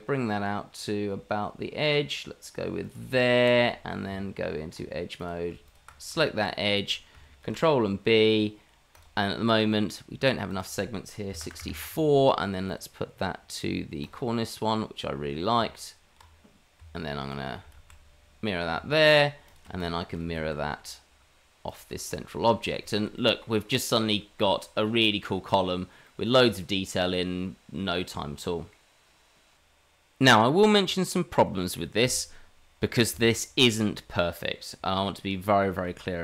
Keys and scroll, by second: 4.1 Tab, 7.4 ctrl+b, 15.6 Tab, 17.4 Tab, 17.7 alt+x, 18.7 Tab, 20.3 alt+x, 20.5 alt+x.